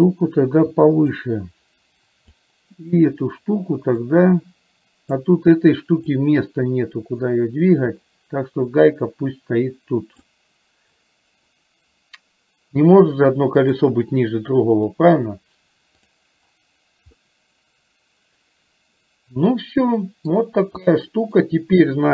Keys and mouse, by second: 0.0-1.2 drag, 2.5 click, 4.3-5.3 drag, 6.6-10.3 drag, 13.2 click, 16.1 click, 17.2-20.3 middle drag, 21.0 shift+middle click.